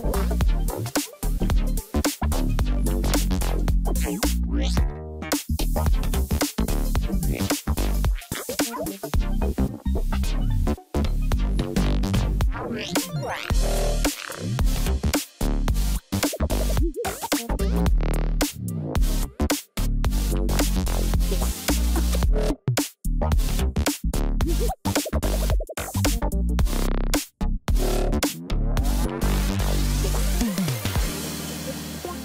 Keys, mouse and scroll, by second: 13.9 ctrl+-, 29.2 ctrl+=, 29.3 ctrl+=, 29.5 ctrl+=, 29.7 ctrl+=.